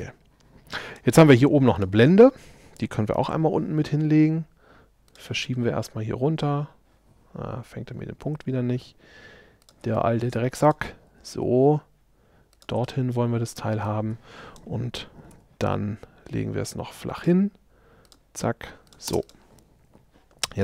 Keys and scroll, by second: 3.3 m, 15.4 q, 19.1 space.